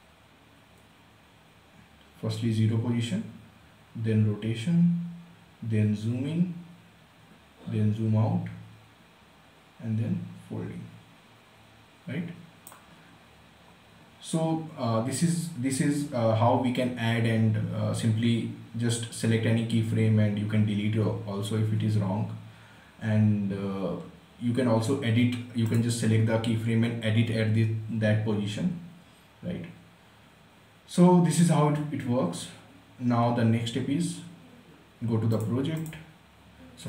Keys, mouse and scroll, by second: 25.2 click, 34.9 click.